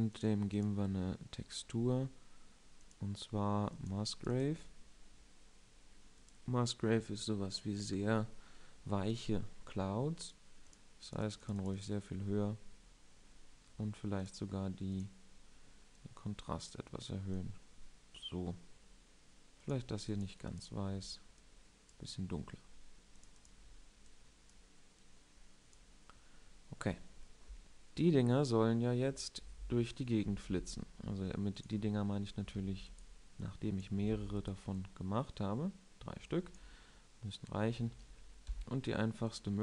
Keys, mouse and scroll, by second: 6.2-6.9 drag, 10.9-26.0 drag, 30.6 s, 32.0-32.9 drag, 32.9 alt+d, 34.4 alt+d, 36.8-37.2 drag, 37.2-38.6 middle drag, 39.5 click.